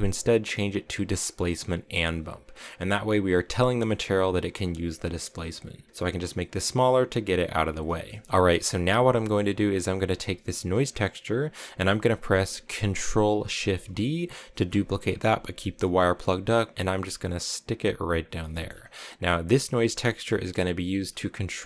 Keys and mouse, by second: 4.5 click, 5.9-7.6 drag, 8.0 middle click, 8.2 x, 8.4 middle click, 10.6 click, 14.6 ctrl+shift+d, 18.4 middle click, 19.0 click.